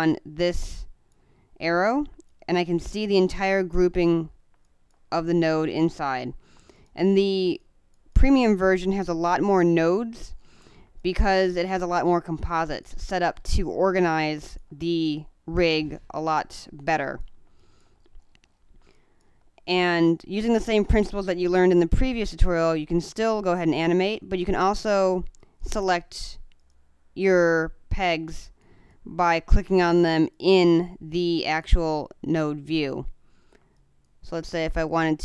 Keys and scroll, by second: 2.2 space, 9.5 space, 12.4 space, 13.9 space, 17.5 space, 19.6 space, 24.5 space, 28.3 space, 31.8 space, 33.7 space.